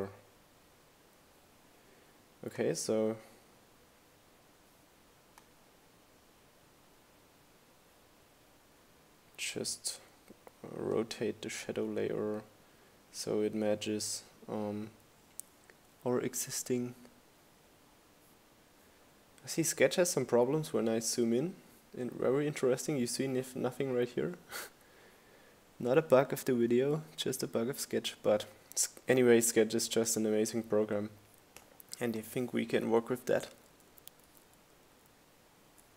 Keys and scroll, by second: 29.7 Right, 30.4 Up, 30.6 Right, 32.8 Up, 33.0 Right, 33.9 Up.